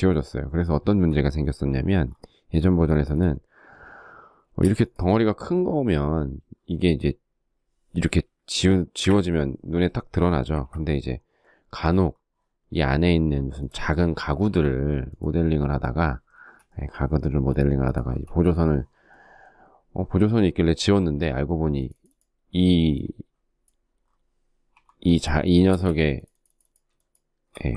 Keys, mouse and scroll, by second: 3.6 space, 8.0 Delete, 9.6 ctrl+z, 13.4 shift+middle click, 15.4 space, 16.4 p, 17.3 space, 24.7 t, 24.7 space, 26.0 shift+click, 26.9 ctrl+g, 27.1 ctrl+middle click.